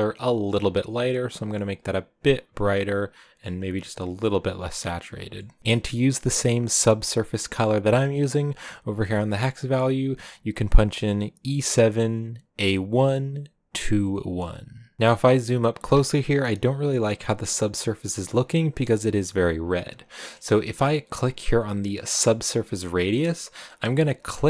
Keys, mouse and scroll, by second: 1.6 click, 5.4 middle click, 5.6 click, 14.9 shift+middle click, 15.7-16.1 scroll up 1, 16.1-17.6 middle drag, 18.3-19.5 shift+middle drag, 19.5-19.9 scroll up 1, 19.9-20.3 scroll down 1, 20.3-22.1 middle drag, 22.1-24.4 drag.